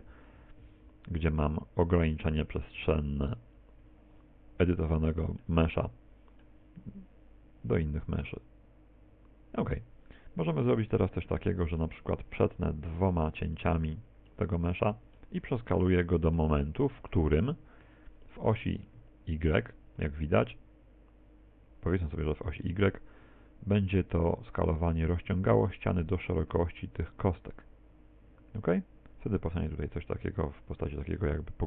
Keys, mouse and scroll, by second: 3.6 ctrl+click, 4.7 middle click, 5.8 middle click, 10.7 middle click, 11.6 middle click, 12.4 ctrl+r, 13.8 click, 14.4 middle click, 15.8 middle click, 16.9 middle click, 20.1 middle click, 25.8 middle click, 31.1 middle click.